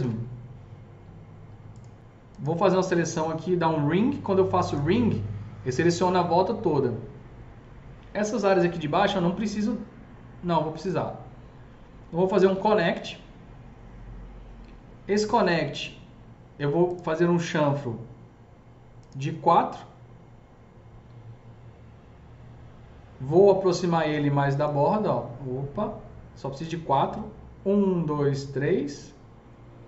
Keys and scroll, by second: 12.4 ctrl+shift+e.